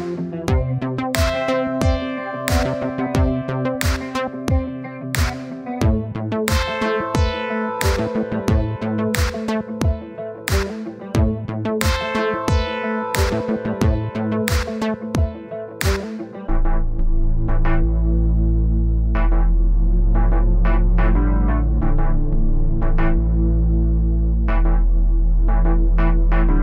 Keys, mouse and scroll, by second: 1.3 click, 1.8-3.0 middle drag, 3.7 click, 4.3 click, 5.3 click, 6.5 click, 6.9 click, 7.7 scroll down 1, 7.9 middle click, 8.4-9.7 drag, 10.1 click, 10.5 click, 11.5 click, 11.9-12.8 scroll up 1, 12.8 scroll down 1, 13.0-17.3 middle drag, 17.5 middle click, 17.8 click, 18.3 scroll up 1, 19.5-21.0 middle drag, 21.0 scroll down 2, 21.5 KP_1, 21.8-22.3 scroll up 3, 23.8-24.2 scroll down 1, 24.5-24.8 scroll down 1, 25.3 click, 26.1 click.